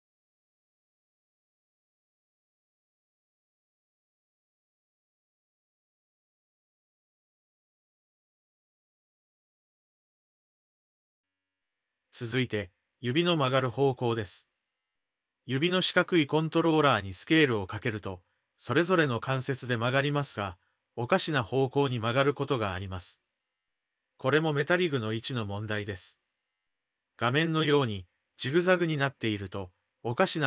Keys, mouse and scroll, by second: 0.1 click, 0.9 g, 2.1 d, 2.3-3.3 drag, 3.3 d, 3.3 d, 3.6 d, 3.8 click, 4.2 d, 4.3 click, 5.0 Tab, 5.3 shift+middle click, 6.1-6.9 drag, 7.3 Tab, 8.1 g, 9.1 click, 9.2 middle click, 10.0 middle click, 10.2 g, 11.1 click, 11.3-11.6 middle drag, 13.1 Tab, 14.2 middle drag, 14.4 click, 15.0 shift+click, 15.1 middle click, 16.0 click, 17.1-17.6 middle drag, 18.6 s, 19.9 click, 20.4 s, 21.7 s, 22.3-22.6 middle drag, 22.5 click, 23.4 s, 24.1 drag, 24.3-26.1 middle drag, 24.4 click, 26.4 ctrl+z, 26.5 ctrl+z, 26.6 ctrl+z, 26.8 ctrl+z, 26.9 ctrl+z, 27.0 ctrl+z, 27.1 ctrl+z, 27.2 ctrl+z, 27.8 Tab, 30.2 click.